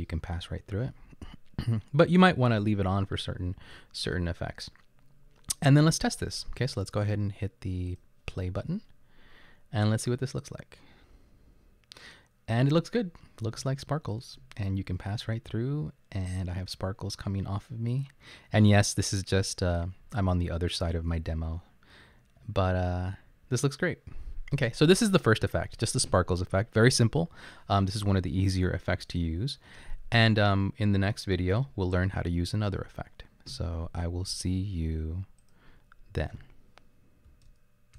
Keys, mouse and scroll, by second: 13.6 Up, 14.1 Up, 14.5 Right, 14.8 Up, 15.2 Left, 16.1 Left, 17.3 Right, 17.8 Right, 18.6 Left, 19.1 Left, 21.0 Right, 21.6 Right.